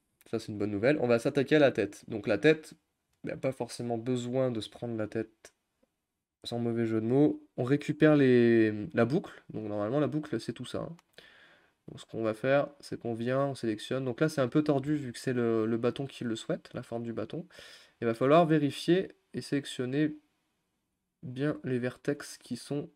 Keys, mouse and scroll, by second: 1.8-2.6 scroll up 2, 2.6-4.7 middle drag, 4.7 click, 5.2 scroll up 1, 5.3 middle click, 5.7-6.1 scroll down 1, 6.1-8.4 middle drag, 8.4 scroll up 1, 8.5 middle click, 8.8-10.0 scroll down 2, 10.6 middle click, 11.4-13.3 scroll up 1, 13.3 ctrl+click, 14.3 ctrl+click, 15.1 ctrl+z, 16.4 ctrl+click, 16.7 middle click, 17.6-18.4 scroll up 1, 18.4-21.9 shift+middle drag, 21.9 ctrl+click, 22.2-22.9 middle drag.